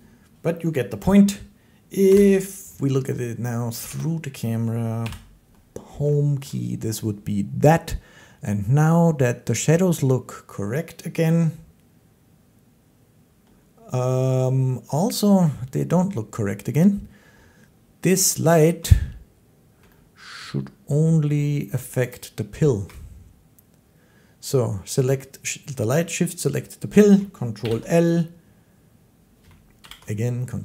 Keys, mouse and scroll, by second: 2.0 Home, 3.7-4.7 drag, 4.9 Home, 6.3 shift+middle click, 20.3 shift+middle click, 22.0 shift+click, 27.4 ctrl+i, 29.6 ctrl+i.